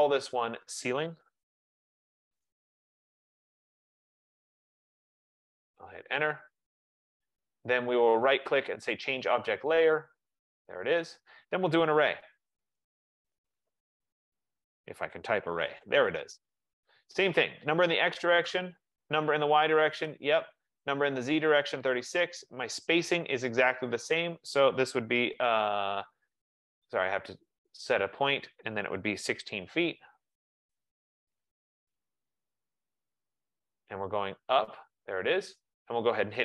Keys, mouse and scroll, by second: 0.7 click, 1.0-3.1 typing, 5.5 Return, 8.5 right click, 10.6 click, 11.9-16.4 typing, 14.8 click, 18.6 Return, 20.1 Return, 22.0 Return, 28.2 click, 28.7-30.3 typing, 31.9 typing, 34.8 click.